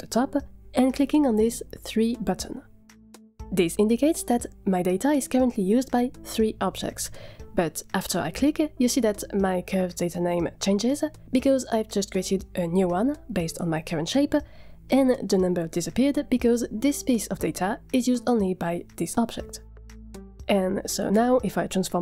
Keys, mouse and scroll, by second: 8.4 click.